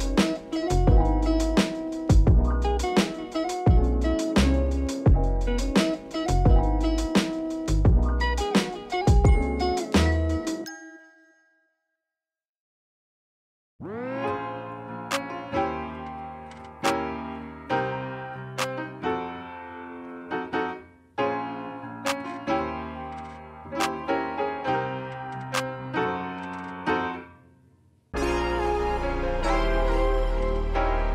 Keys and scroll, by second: 0.1 ctrl+s, 1.6 m, 7.6 c, 9.7 e, 14.0 m, 25.0 q, 28.5 s.